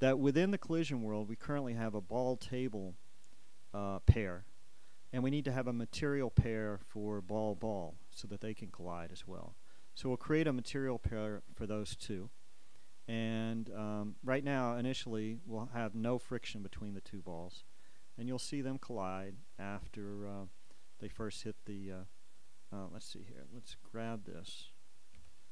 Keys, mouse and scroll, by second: 10.9-22.2 drag, 24.1 right click, 25.4 g.